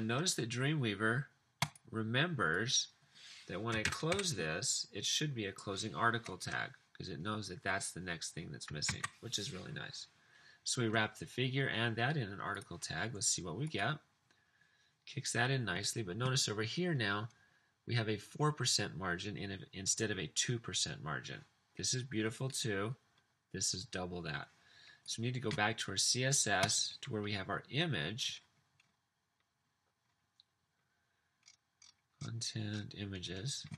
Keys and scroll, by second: 3.9 typing, 9.0 super+s.